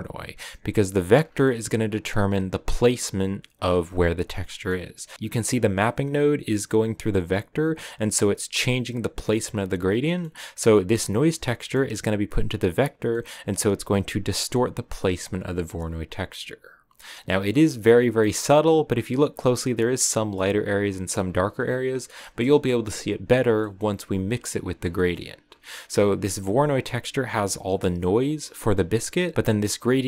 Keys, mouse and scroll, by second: 5.7 click, 8.3 click, 10.8 click, 17.2 middle click, 17.4-19.7 scroll up 7, 18.1 middle click, 20.9 scroll up 1, 21.1-22.1 scroll down 4, 22.4 KP_0, 25.9 click, 29.8 click.